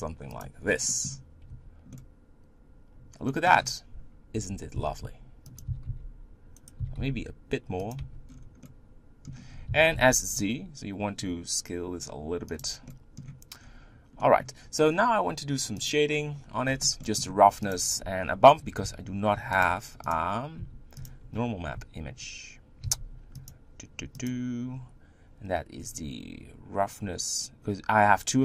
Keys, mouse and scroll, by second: 1.5 Tab, 1.9-4.4 middle drag, 4.4 Tab, 4.8 s, 5.7 s, 7.8 s, 8.0 Tab, 8.3-8.6 scroll down 5, 8.6 middle click, 9.3-9.7 scroll up 4, 9.7 s, 12.9 middle click, 13.6-14.2 scroll down 3, 14.2-15.8 middle drag, 15.8 click, 22.8 shift+d, 24.4-28.4 drag.